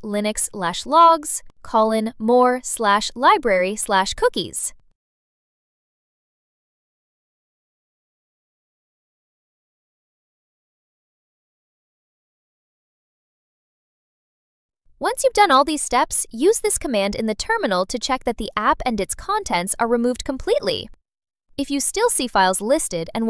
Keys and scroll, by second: 1.3 BackSpace, 1.8 Return, 2.1 BackSpace, 2.8 BackSpace, 4.2 BackSpace, 4.9 BackSpace, 5.6 BackSpace, 6.5 BackSpace, 9.1 BackSpace, 10.0 BackSpace, 10.8 BackSpace, 12.8 BackSpace, 13.5 super+a, 13.6 BackSpace, 15.6 super+v, 16.9 super+v, 18.4 Return.